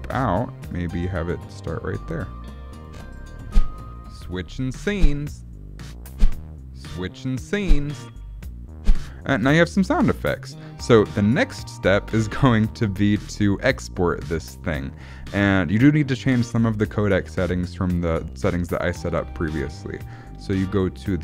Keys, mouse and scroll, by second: 0.7 click, 2.8 click, 3.4 space, 9.3 space.